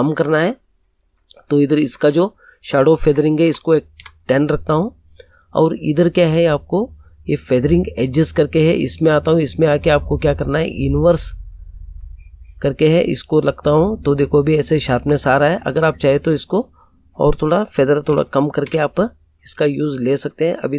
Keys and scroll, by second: 3.0 1, 3.4 0, 3.9 Return, 18.0 8, 18.6 Return.